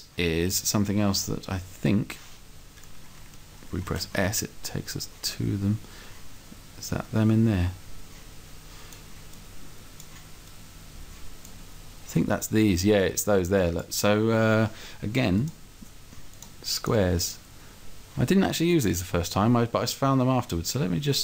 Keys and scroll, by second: 3.5 z, 6.4 s.